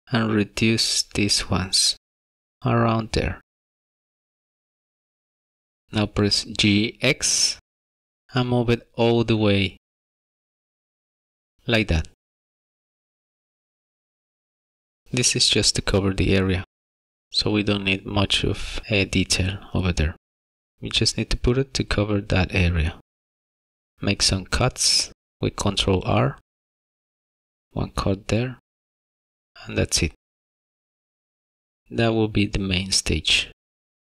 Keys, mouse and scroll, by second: 0.2 s, 5.2 scroll down 3, 5.3 shift+middle click, 5.4 middle click, 6.6 g, 15.6 shift+middle click, 18.0 shift+middle click, 20.4 ctrl+r, 25.6 ctrl+r, 30.5 ctrl+r.